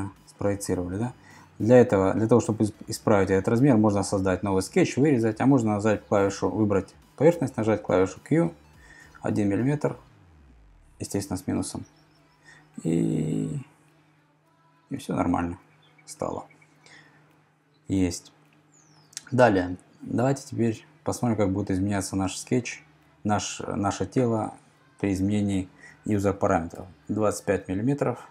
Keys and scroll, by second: 7.7 q, 9.0 1, 10.8 Left, 11.4 -, 14.9 Return, 24.1 BackSpace, 24.5 BackSpace, 24.8 5, 27.2 Return.